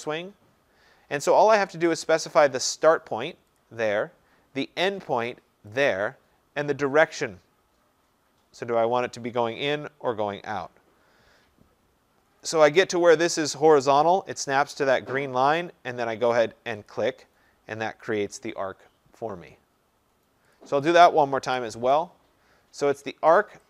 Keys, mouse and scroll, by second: 3.6 click, 5.9 click, 17.0 click, 20.6 click, 20.9 click, 21.5 Delete.